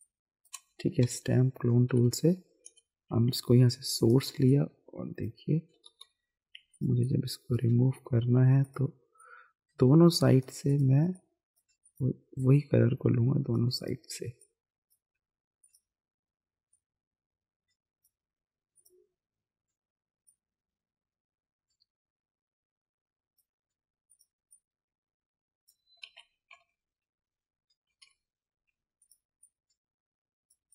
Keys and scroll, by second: 1.0-2.6 typing, 5.8 [, 26.0 ctrl+z, 26.6 ctrl+-, 28.0 ctrl+-.